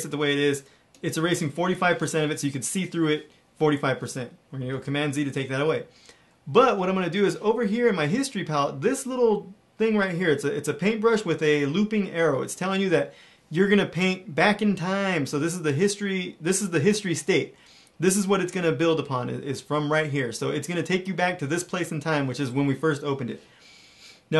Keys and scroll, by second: 4.6 super+z.